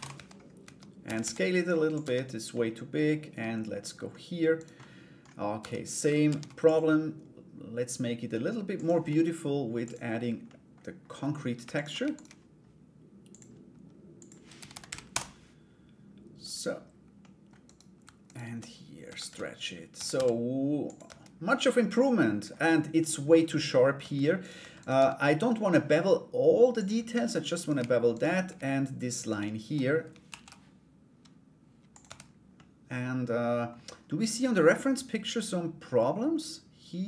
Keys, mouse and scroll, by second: 0.6 a, 0.8 s, 1.6 Tab, 2.1 middle click, 2.9 middle click, 4.1 right click, 4.4 middle click, 5.2 Tab, 5.8 ctrl+r, 9.4 click, 10.0 middle click, 11.3 alt+right click, 11.7 shift+right click, 12.9 click, 13.8-15.3 drag, 16.0 click, 16.8 middle click, 17.2 right click, 17.8 alt+right click, 18.8 a, 19.7 s, 20.6 Tab, 21.1 middle click, 22.6 middle click, 24.0 right click, 24.4 right click, 24.8 middle click, 26.3 click, 27.1 right click, 27.7 shift+right click, 28.8 shift+right click, 29.8 ctrl+b, 31.6 Tab, 32.1-33.3 middle drag.